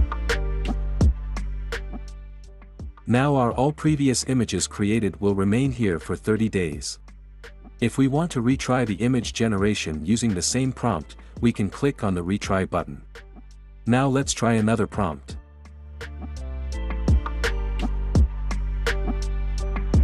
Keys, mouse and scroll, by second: 0.7-2.0 drag, 14.1-15.2 drag, 16.3-17.5 drag, 19.0-20.0 drag.